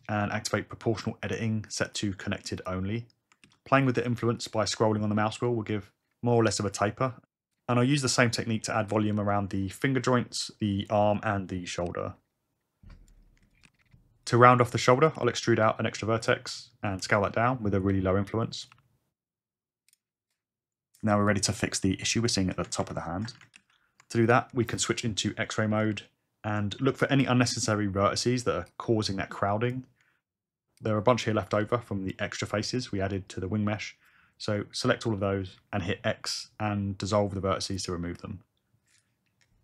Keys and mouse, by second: 1.2 click, 1.9-2.9 drag, 3.4 ctrl+a, 8.6 shift+click, 9.5 ctrl+a, 11.9 ctrl+a, 13.0 click, 13.6 ctrl+a, 14.2 click, 14.4 click, 15.1 alt+z, 15.2 alt+z, 15.3 `, 15.5 e, 16.2 click, 17.0 ctrl+s, 17.0 ctrl+a, 18.7 g, 23.6 alt+z, 28.7 click, 30.8 shift+click, 36.1 x.